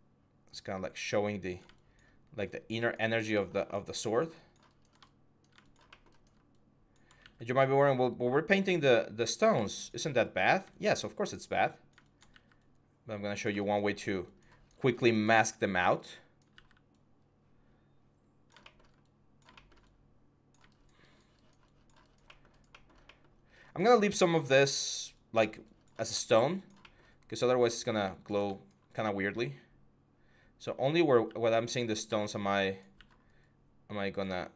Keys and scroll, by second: 7.0 x, 12.1 x, 16.3 x, 31.0 x, 31.8 x.